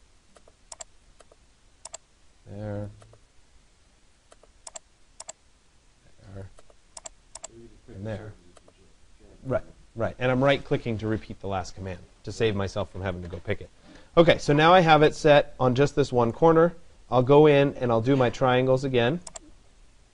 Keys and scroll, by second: 12.5 Escape.